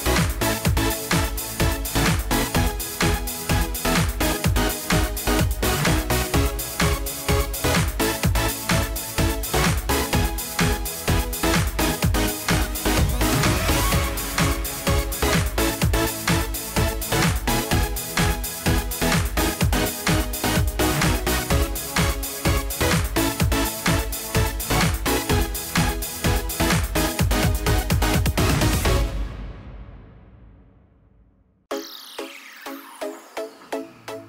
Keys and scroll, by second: 5.3 ctrl+a, 32.6 ctrl+g.